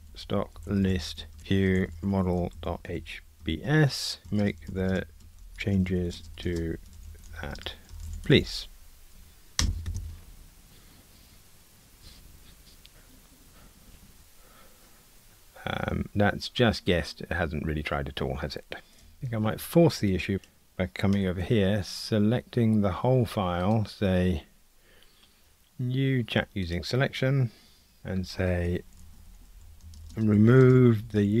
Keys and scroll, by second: 21.3 super+a.